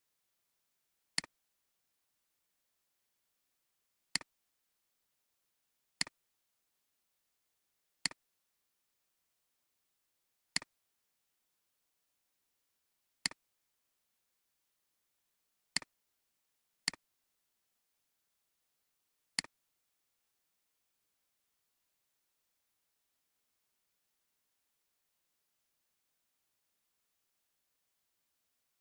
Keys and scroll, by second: 21.7-22.5 typing.